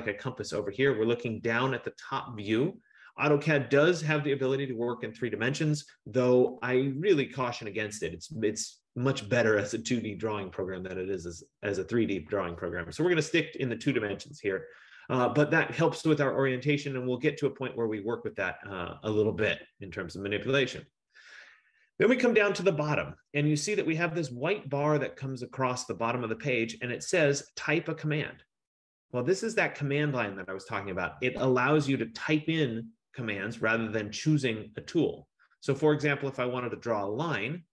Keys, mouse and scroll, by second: 0.3 F15.